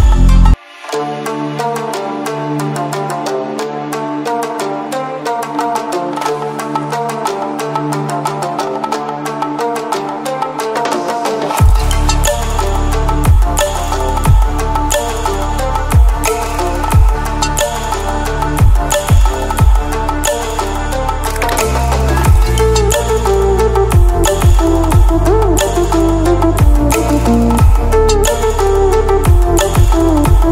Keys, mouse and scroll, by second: 0.7 click, 8.2-11.4 drag, 18.0 click, 20.8-23.3 shift+drag, 25.8 ctrl+alt+scroll up 1, 26.7-28.3 drag, 28.7 ctrl+alt+scroll down 1, 30.0 click.